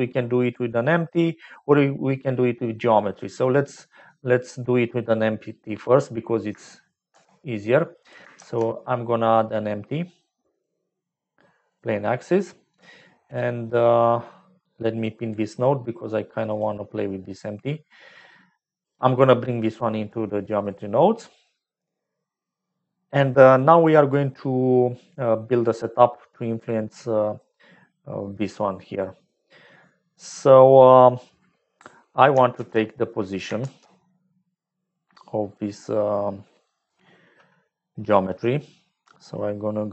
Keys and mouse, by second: 1.0 click, 7.9 click, 8.3 shift+a, 14.9 click, 16.4 click, 17.4-18.9 drag, 23.6 click, 25.0 click, 33.2 click, 33.5 shift+a.